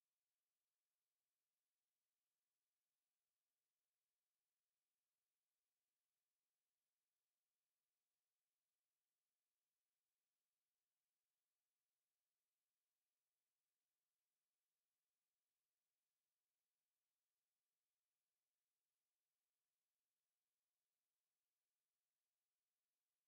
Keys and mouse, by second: 3.6 alt+right click, 4.1 right click, 5.1 click, 9.0 alt+click, 9.4 alt+right click, 10.7 q, 11.5 shift+click, 12.1 shift+click, 12.6 shift+click, 13.7 shift+click, 14.8 shift+click, 15.3 shift+right click, 17.1 click, 18.9 alt+right click, 19.4 click, 19.7 right click, 20.3 click, 21.0 alt+click, 21.3 alt+right click, 23.1 ctrl+shift+h.